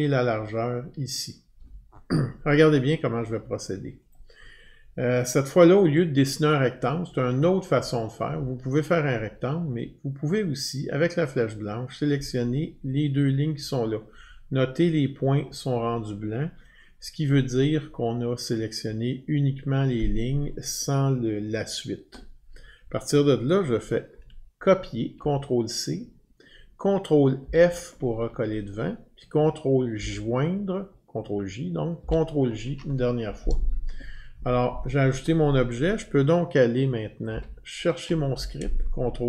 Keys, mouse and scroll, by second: 0.6 drag, 4.1-9.1 drag, 12.0-17.1 drag, 23.8 click, 25.1 ctrl+c, 27.4 ctrl+f, 29.9 ctrl+j, 32.0 ctrl+j, 37.3 ctrl+F12.